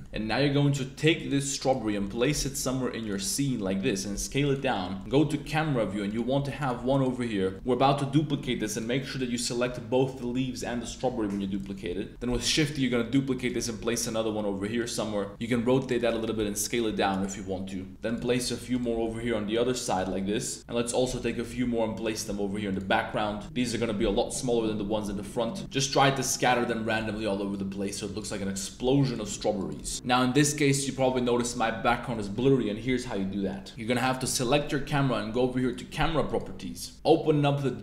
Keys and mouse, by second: 1.2-1.7 drag, 1.9 click, 2.1 shift+drag, 2.4 g, 3.2 click, 3.6-6.7 typing, 4.5 drag, 4.8 click, 6.1 drag, 9.3 shift+click, 11.1-14.3 typing, 11.5 click, 14.0 click, 15.3 r, 16.2 r, 16.4 z, 16.6 click, 16.9 s, 17.9 shift+d, 18.0 click, 18.3 r, 18.7 click, 19.5 shift+d, 20.0 r, 20.1 z, 20.6-20.9 middle drag, 20.6 s, 21.2 middle click, 22.0 shift+d, 22.7 drag, 22.9 middle click, 23.3 s, 23.9 g, 24.0 KP_0, 25.4 shift+d, 25.9 shift+d, 26.8 click, 27.6-29.8 typing, 33.9 click, 35.6 click, 36.2 click.